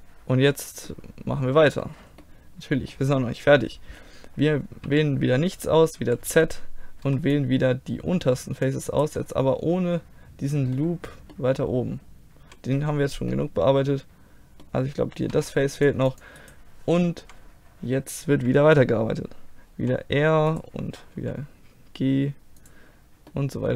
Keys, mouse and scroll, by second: 4.9 a, 6.1 z, 7.1 c, 9.2-10.6 middle drag, 11.2 middle click, 13.2 middle click, 13.6-15.4 middle drag, 15.4 c, 16.5 middle click, 17.3 KP_1, 18.3 KP_3, 19.8 r, 21.2 g, 23.4-23.7 middle drag.